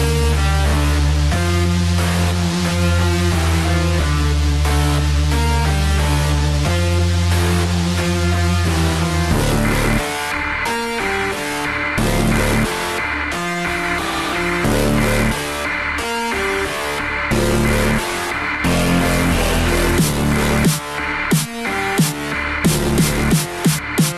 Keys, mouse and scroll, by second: 0.0 s, 3.1 a, 3.5 a, 5.3 g, 23.6-24.1 drag.